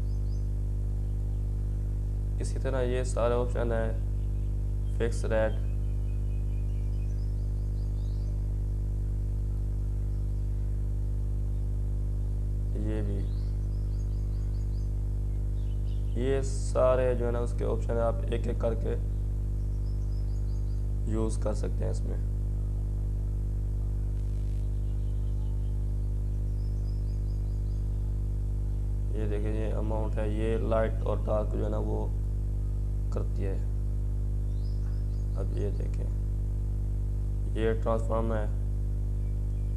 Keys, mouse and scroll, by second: 2.0-5.7 drag, 5.7-16.5 drag, 16.5-25.0 drag, 17.5-18.3 typing, 26.2-31.0 drag, 30.6-31.3 typing.